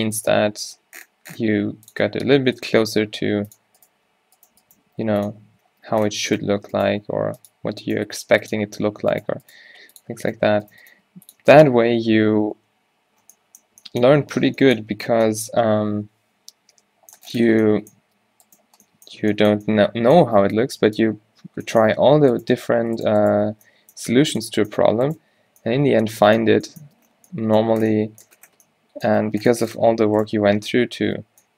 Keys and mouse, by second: 0.5 g, 3.0 g, 4.0 g, 4.8 g, 5.6 Tab, 6.2 Tab, 6.9 right click, 7.1 g, 8.2 g, 9.7 g, 10.4 g, 11.0 g, 11.5 Tab, 12.7 ctrl+z, 14.3 Tab, 15.0 Tab, 17.1 middle click, 18.4 Tab, 20.8 a, 20.8 b, 23.6 q, 25.6 q, 27.4 Tab, 30.3 Tab, 30.6 q, 31.2 q.